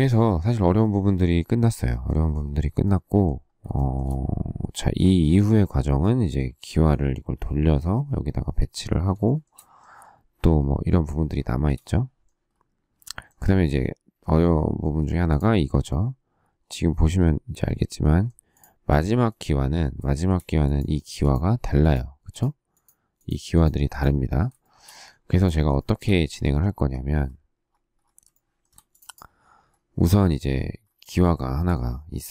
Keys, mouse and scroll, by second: 3.7 shift+middle click, 6.6 shift+middle click, 9.2 shift+middle click, 9.4 shift+scroll, 11.4 shift+middle click, 20.0 shift+middle click, 24.6 shift+middle click, 25.9 shift+double middle click, 26.2 Escape, 26.7 Escape, 28.3 shift+middle click, 31.3 shift+middle click.